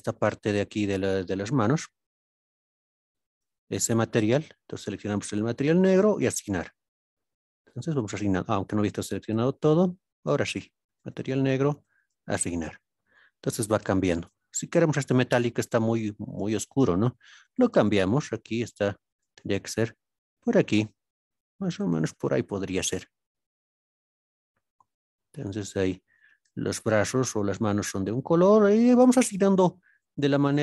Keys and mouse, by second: 0.6 shift+click, 1.7 shift+click, 5.4 click, 6.2 click, 7.6-8.5 middle drag, 9.2 alt+click, 11.0 click, 11.7 click, 12.7-13.1 middle drag, 13.8 middle click, 15.1 click, 15.5 click, 18.2 drag, 24.3-26.2 middle drag, 27.9 middle click, 29.4 alt+click, 30.4 shift+click.